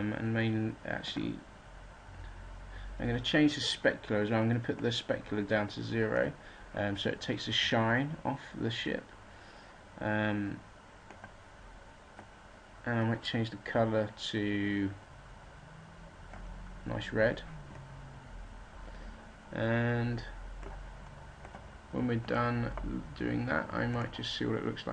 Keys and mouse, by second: 18.5 middle click.